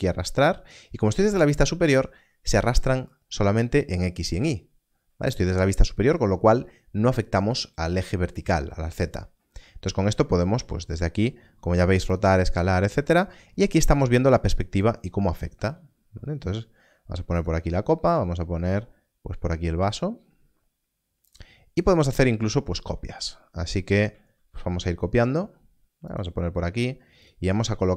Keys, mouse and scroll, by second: 10.5 r, 12.1 click, 15.5 g, 17.3 click, 21.2 g, 21.3 click, 24.3 shift+d, 26.1 click.